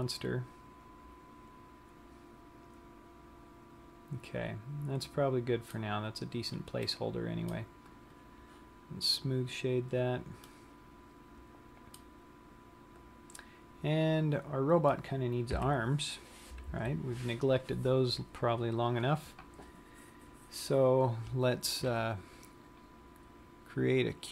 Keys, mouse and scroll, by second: 0.3 middle click, 6.5 scroll down 1, 7.2 middle click, 9.7 click, 10.7 middle click, 13.4-14.0 scroll down 1, 14.9-15.9 scroll up 2, 15.9 KP_3, 17.1 z, 23.4 click.